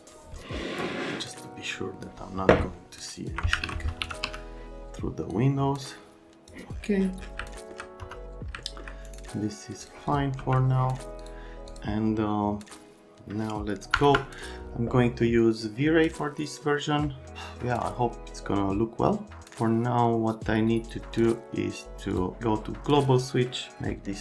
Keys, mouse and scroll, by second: 0.0 click, 3.2 ctrl+click, 3.6 alt+q, 3.7-4.7 typing, 6.3 click, 7.5 alt+middle click, 8.0 F3, 10.4 x.